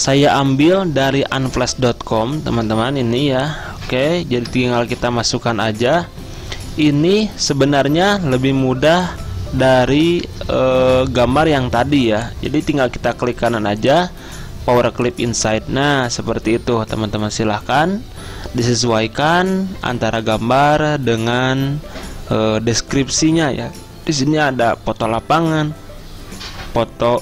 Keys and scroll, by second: 1.7 alt+Tab, 2.5 alt+Tab, 2.9 alt+Tab, 4.5 alt+Tab, 9.6-10.6 typing, 11.8 typing.